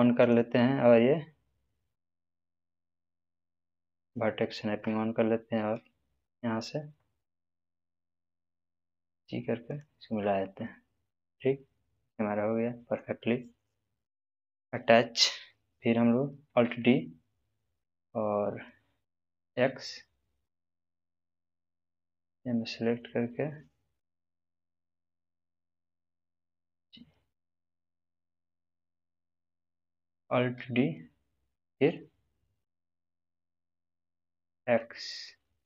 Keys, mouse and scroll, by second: 0.1 click, 0.2 click, 4.0 click, 8.6 click, 8.7 g, 9.6 click, 11.3-13.1 middle drag, 14.3 click, 16.6 alt+d, 19.5 x, 20.9 click, 29.0 right click, 30.5 alt+d.